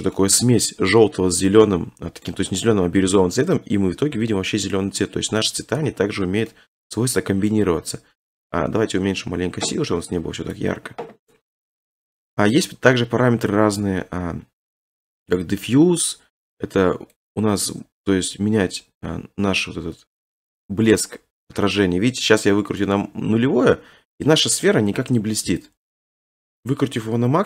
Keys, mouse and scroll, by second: 0.1 shift+middle click, 0.3 middle click, 0.5-1.1 scroll, 1.1 scroll, 1.2 shift+middle click, 2.3 middle click, 3.2 middle click, 3.3 scroll, 5.0 scroll, 6.5 middle click, 6.9 middle click, 7.0 middle click, 7.3 middle click, 7.4 middle click, 7.6 middle click, 8.5 scroll, 10.6 click, 11.3 scroll, 12.4 middle click, 13.3 middle click, 17.2 click, 22.8 click, 23.2-23.6 scroll, 26.5 click.